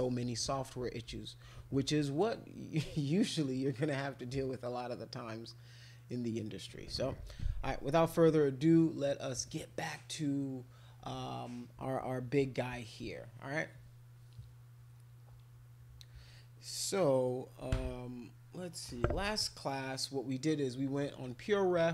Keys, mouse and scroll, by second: 12.7 click.